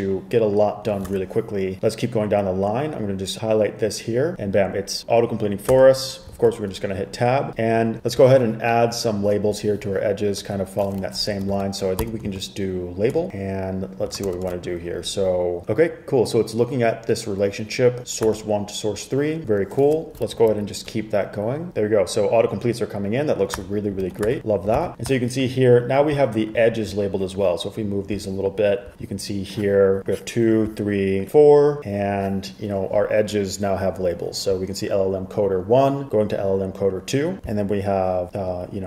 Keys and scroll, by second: 1.2 super+Tab, 5.9 Tab, 11.1 Right, 11.5-12.9 typing, 14.4 ', 18.4 Tab, 20.6 Page_Down, 23.7 Tab, 24.2 super+s, 24.9 super+r.